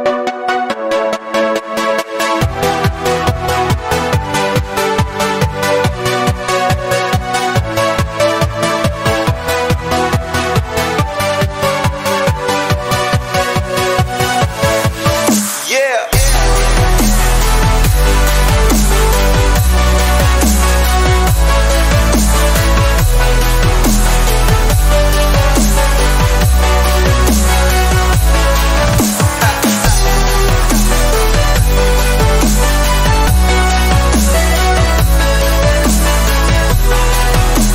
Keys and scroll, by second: 2.6 ctrl+z.